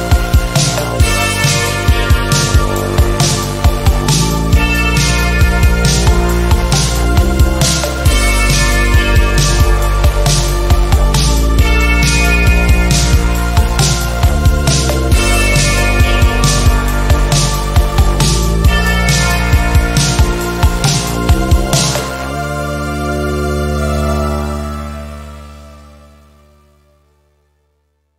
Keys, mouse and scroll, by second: 0.8-2.1 drag, 2.4 ctrl+d, 3.0-4.2 drag, 5.8-7.5 typing, 7.9-11.4 drag, 12.2 ctrl+z, 13.0-15.4 drag, 17.4 click, 20.1-25.9 typing, 26.8 click.